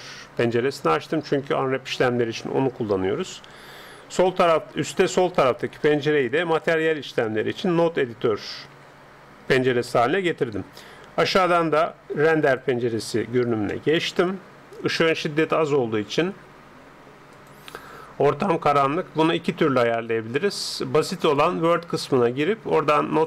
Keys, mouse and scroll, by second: 6.1-7.9 drag, 8.7 n, 9.9-10.9 middle drag, 11.5-13.3 drag, 13.7-17.3 middle drag, 17.3-19.1 drag, 21.5-23.2 drag.